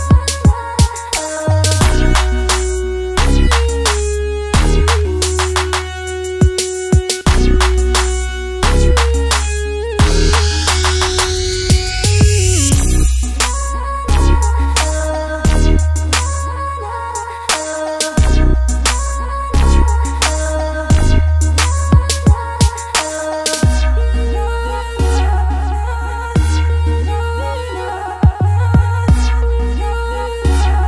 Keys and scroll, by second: 2.7 super+z.